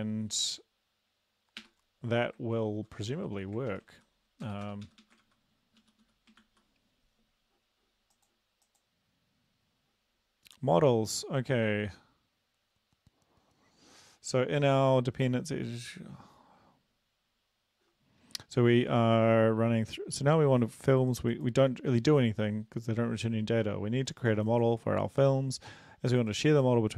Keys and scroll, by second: 1.6 BackSpace, 2.8 Right, 3.2 shift+Down, 3.7 ctrl+x, 3.9 Up, 4.5 Return, 4.6 Return, 4.9 Up, 5.0 Up, 5.2 ctrl+v, 5.8 Down, 6.4 ctrl+s.